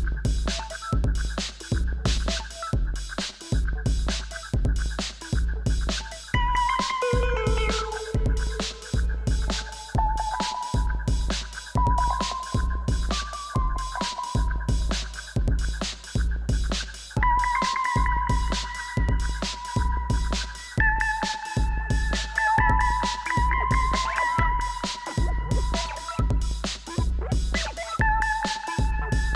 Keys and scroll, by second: 7.4 shift+a, 8.1 m, 8.2 i, 12.3 shift+a, 13.1 t, 13.3 r, 20.3 f, 22.3 7, 24.7 2, 26.6 d, 27.0 Return, 29.1 1.